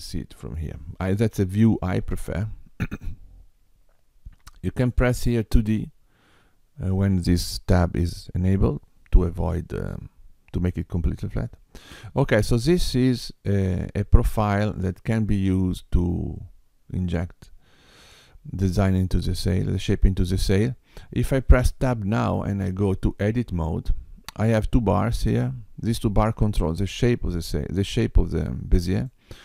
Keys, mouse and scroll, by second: 4.9 click, 13.4 click, 22.4 Tab, 25.8 click, 27.3 click, 28.9 click.